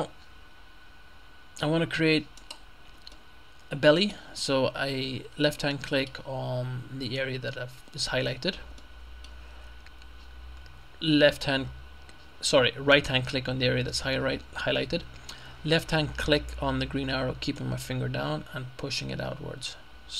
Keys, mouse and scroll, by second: 0.0-2.1 middle drag, 2.4 right click, 3.2-4.6 middle drag, 4.6-5.1 scroll up 1, 5.8 middle click, 8.8 middle click, 13.0 right click, 17.6-20.1 drag.